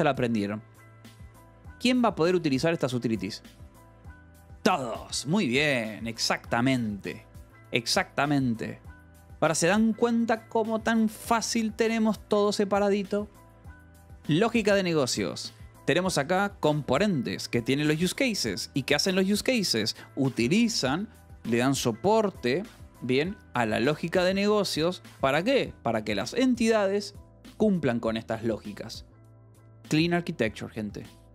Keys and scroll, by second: 1.4 Escape, 1.8 u, 2.6 k, 3.8 Escape, 9.7 j, 10.2 Escape, 13.7 k, 14.1 j, 14.8 Escape, 15.0 k, 15.3 j, 16.7 j, 18.6 Escape, 18.8 k, 19.4 j, 20.4 Escape, 22.6 k, 24.2 k, 24.6 Escape, 25.4 j, 26.6 Escape, 27.4 j, 30.8 Escape.